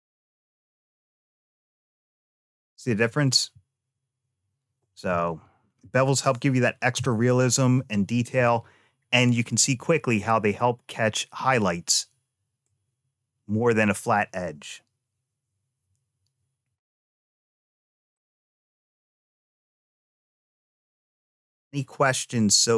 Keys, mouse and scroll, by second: 1.0 click, 1.3-2.9 middle drag, 6.8 Tab, 11.6 middle click, 16.7 click, 17.1 shift+click, 18.0 x, 19.1 click, 20.1 x, 21.5 middle click.